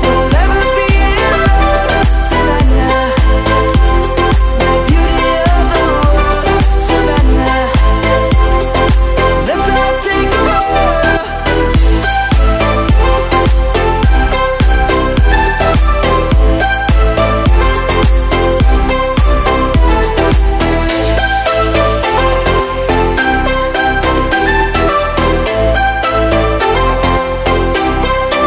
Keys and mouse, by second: 0.7 ctrl+7, 2.1 shift+middle click, 3.6 s, 5.5 click, 6.4 shift+middle click, 10.6 y, 10.6 right click, 11.3 g, 13.6 click, 14.6 shift+middle click, 16.2 s, 17.6 click, 21.7 shift+d, 22.8 right click, 23.6 g, 27.0 shift+click.